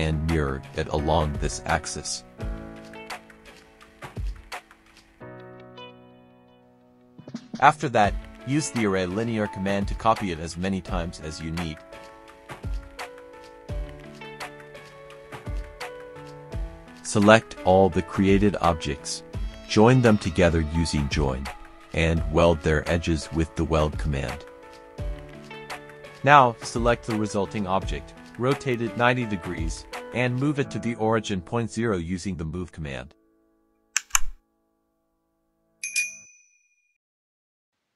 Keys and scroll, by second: 0.0-0.3 typing, 4.1 typing, 5.2-6.3 typing, 7.3 space, 9.4 KP_5, 9.9 Return, 19.1 ctrl+j, 21.1-22.4 typing, 23.1 Return, 24.4 Return, 29.5 Return, 30.9 m, 31.4 space, 34.3 KP_0, 34.7 Return.